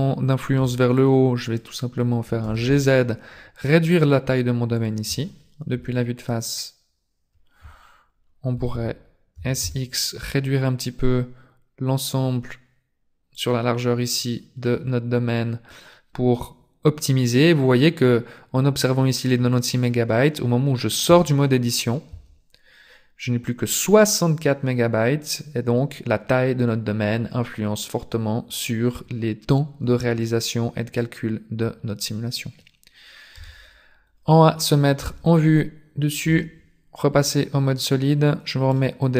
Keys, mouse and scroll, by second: 0.5 b, 2.4 g, 5.7 KP_1, 8.5 a, 8.7 a, 9.3 s, 14.5 scroll down 1, 14.7 middle click, 21.1 Tab, 22.1 Tab, 33.3 KP_0, 35.1 z, 36.2 z, 37.2 click.